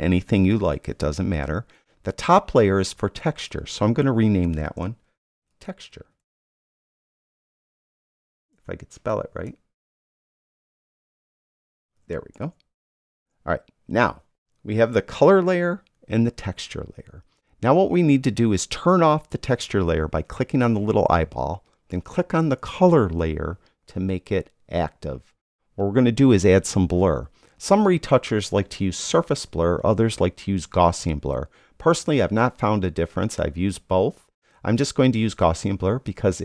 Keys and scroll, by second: 0.6 Return, 5.1-8.3 typing, 10.2 BackSpace, 11.4 u, 11.9 e, 13.1 Return.